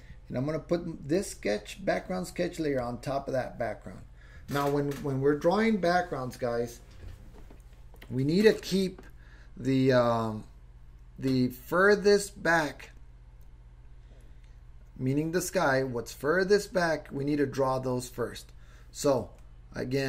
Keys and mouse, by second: 1.2 click, 2.8 click.